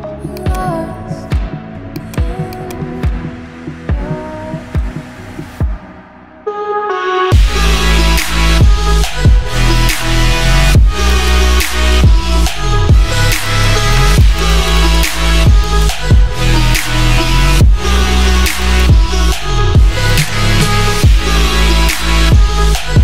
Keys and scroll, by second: 17.0 ], 19.8 [.